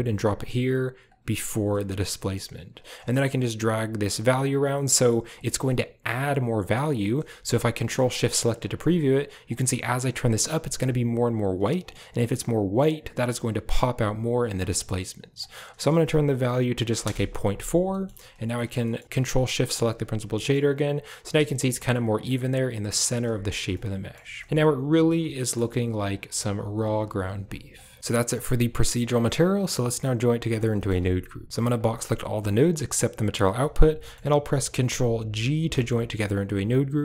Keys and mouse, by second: 0.9 click, 3.9 shift+click, 5.1-6.7 shift+drag, 8.1 ctrl+shift+click, 9.3-11.7 shift+drag, 12.2-14.3 shift+drag, 15.2-16.9 drag, 18.7 middle drag, 19.5 ctrl+shift+click, 20.3 click, 21.1 a, 21.4 shift+drag, 22.2 right drag, 23.1 a, 23.7 shift+drag, 24.3 shift+drag, 25.3 shift+click, 27.6 click, 27.8 click, 29.4 click, 30.6 middle click, 31.7-33.2 drag, 33.8 middle click, 35.3 ctrl+g.